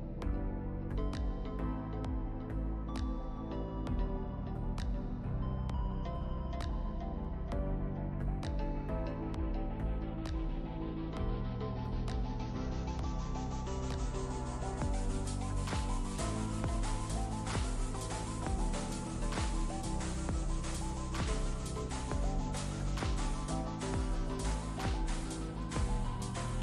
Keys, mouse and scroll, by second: 0.4 click, 8.8 click, 10.4-10.8 shift+drag, 14.8 click, 15.7 right click, 16.4 click, 17.6 click, 20.2 click, 21.5 ctrl+space, 21.7 ctrl+click, 21.7-22.1 ctrl+space, 22.7-23.2 drag.